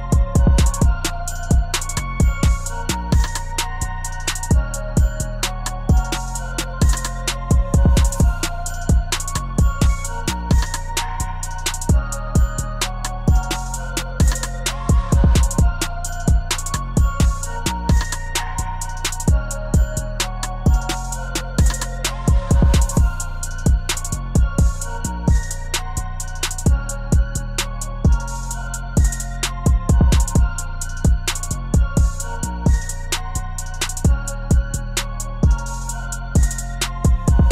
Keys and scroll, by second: 33.4 ctrl+z.